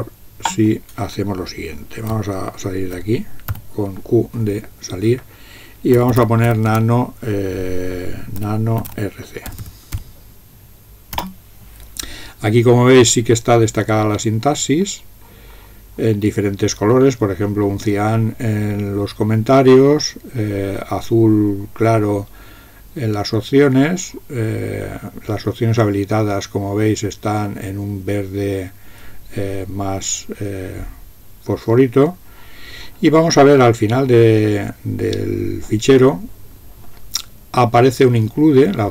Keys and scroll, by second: 3.6 typing, 5.7-7.0 typing, 8.2-10.5 typing, 11.2 Return, 12.1 typing.